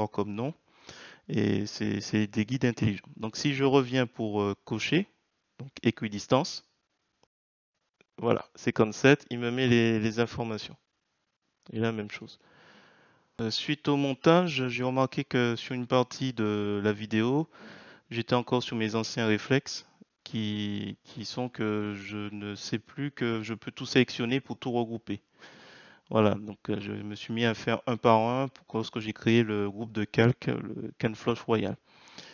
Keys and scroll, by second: 18.7-19.6 typing, 20.6 Return, 23.6 ctrl+c.